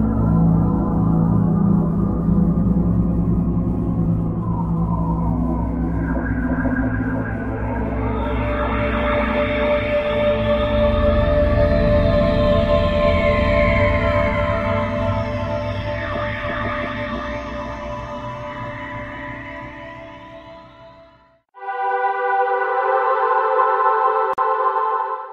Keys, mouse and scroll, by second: 1.9 shift+d, 3.2 click, 4.1 shift+d, 5.1 click, 5.8 shift+d, 7.1 click, 7.5 shift+d, 8.4 click, 9.1 shift+d, 10.9 click, 12.1-12.5 scroll down 3, 13.1 middle click.